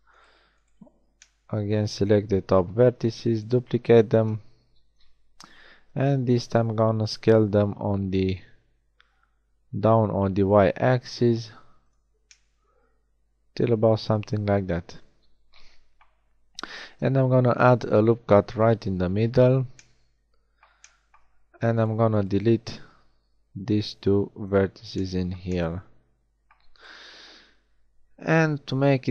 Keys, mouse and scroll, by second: 3.0 shift+d, 4.6 KP_7, 5.8 s, 16.4 ctrl+r, 21.8-24.0 right drag, 24.0 x, 26.8-28.4 right drag, 28.4 l.